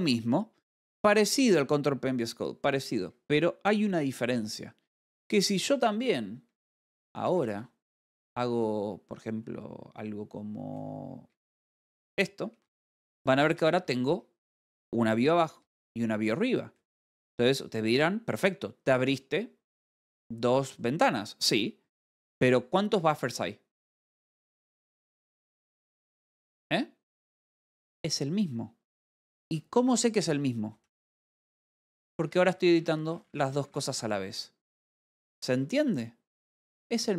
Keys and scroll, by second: 6.9-8.5 typing, 11.9 w, 13.1 k, 13.8 j, 17.8 g, 21.1 Escape, 31.0-32.4 typing, 35.2 z.